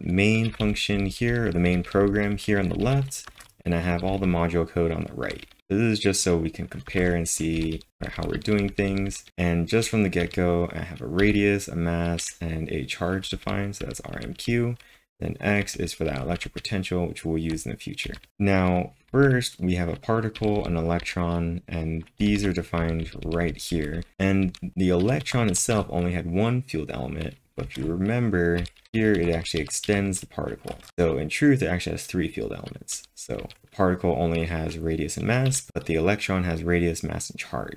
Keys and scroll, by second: 0.0-5.7 typing, 6.9 space, 7.0 1, 8.7 typing, 10.0-12.2 typing, 13.3 k, 17.2-19.1 typing, 22.0-24.9 typing, 27.6 space, 27.8 2, 30.7 space, 30.8 1, 35.5 j.